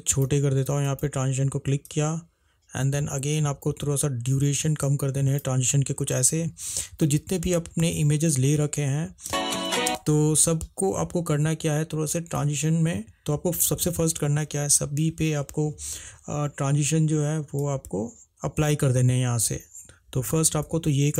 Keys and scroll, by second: 9.4 space, 10.0 space, 13.2 -.